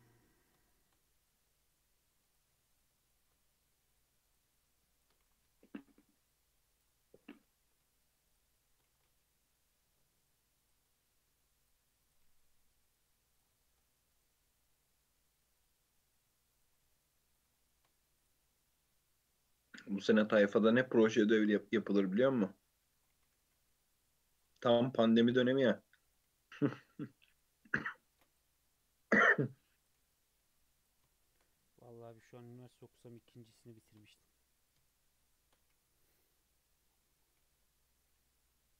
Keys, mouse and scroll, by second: 0.7 shift+click, 1.2 f, 2.3 click, 2.7 shift+click, 3.1 shift+click, 3.5 f, 3.9 click, 4.3 click, 5.0 shift+click, 5.3 g, 7.3 click, 8.0 shift+click, 8.3 shift+click, 8.9 g, 10.6 click, 10.9 g, 12.1 click, 12.3 g, 13.6 shift+middle click, 14.2 click, 14.3 g, 16.6 click, 16.9 g, 17.7 shift+middle click, 18.2 click, 18.5 g, 20.4 click, 20.6 g, 22.2 g, 23.2 g, 24.5 g, 25.5-26.1 shift+middle drag, 26.1 click, 26.3 g, 27.7-28.1 shift+middle drag, 28.1 ctrl+r, 29.8 click, 30.0 g, 31.1 shift+middle click, 31.5-32.0 scroll up 2, 32.0 shift+middle click, 32.3-33.0 scroll up 2, 33.0 click, 33.7 shift+click, 35.3 shift+click, 35.7 f, 36.1 click, 36.3 Tab, 36.5-37.4 scroll down 6, 37.4 alt+z, 37.6-38.7 middle drag.